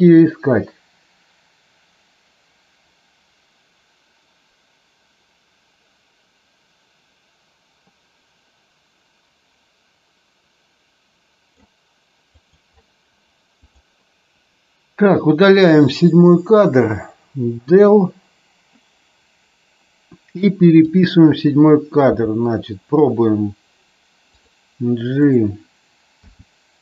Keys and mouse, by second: 12.2 click, 17.5 Delete, 20.8 click, 22.0 g, 25.2 click, 26.0 r.